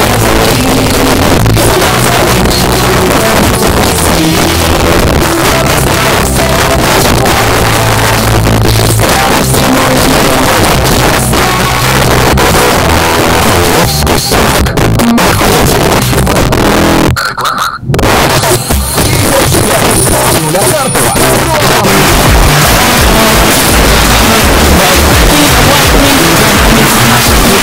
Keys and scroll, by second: 0.2-2.0 Down, 2.3 Down, 2.4 Down, 3.0 Up, 27.5 space.